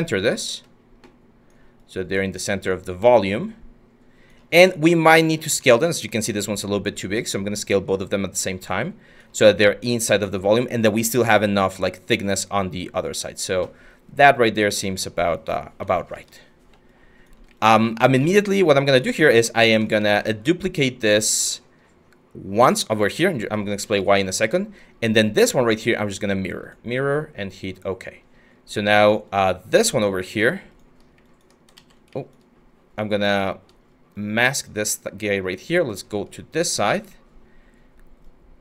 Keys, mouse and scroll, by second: 16.2 q, 20.0 w, 31.4 ctrl+z.